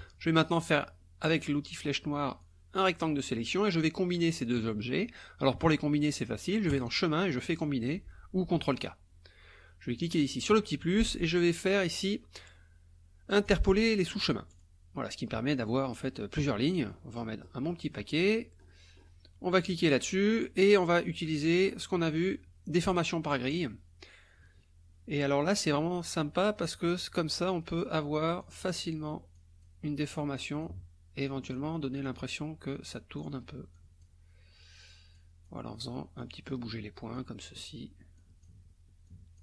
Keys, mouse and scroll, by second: 1.8 click, 2.4-3.5 drag, 6.8 click, 8.8 click, 10.0 click, 11.3-11.7 scroll down 1, 11.9 scroll down 1, 13.5 click, 14.5 click, 16.9-18.4 scroll up 1, 18.4-19.3 scroll up 1, 19.7 click, 21.1 scroll up 2, 21.4 scroll down 2, 22.9 click, 23.5 click, 25.4 click, 26.7 click, 27.5 click, 28.4 click, 29.4 click, 30.4 click, 31.3 click, 32.1 click, 32.9 click, 33.8 click, 35.2 click, 36.2 click, 37.2 click, 38.2 click, 39.1 click.